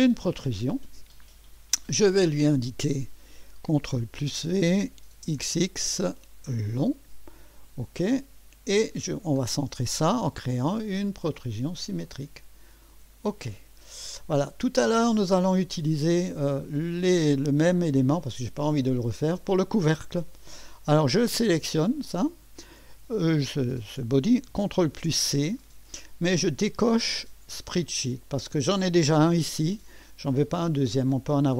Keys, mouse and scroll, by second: 2.3 click, 4.0 ctrl+v, 5.3 typing, 6.7 click, 7.7 click, 10.8 click, 12.9 click, 15.0-16.7 drag, 19.5-20.5 drag, 21.5 click, 25.0 ctrl+c, 25.0 typing, 28.5 click.